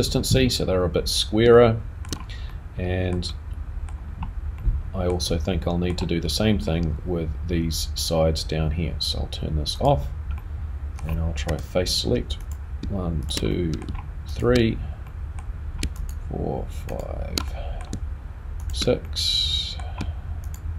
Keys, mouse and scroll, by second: 1.5 shift+middle click, 2.5 middle click, 3.3 middle click, 4.0-4.6 scroll down 2, 4.6 middle click, 5.7 middle click, 6.2-9.3 scroll up 2, 9.8 click, 10.4 middle click, 11.5 3, 12.4 click, 13.2 shift+click, 13.6 middle click, 14.3 shift+click, 15.1 middle click, 16.0 shift+click, 17.4 shift+click, 17.5 middle click, 18.9 shift+click, 19.0 middle click, 20.4 shift+click.